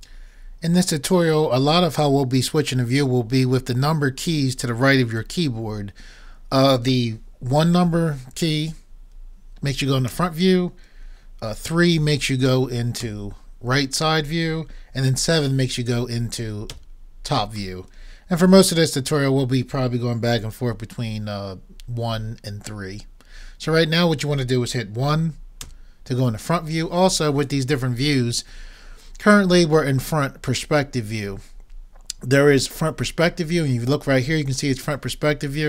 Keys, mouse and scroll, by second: 0.5 right click, 10.1 KP_1, 13.0 KP_3, 16.8 KP_7, 25.7 KP_1.